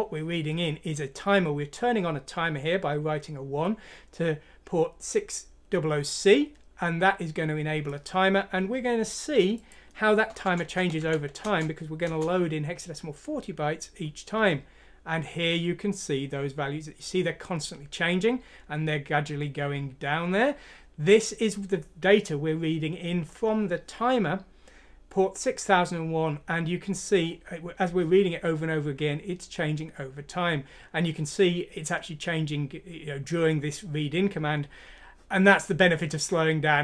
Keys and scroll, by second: 11.5 Return, 12.1 Return.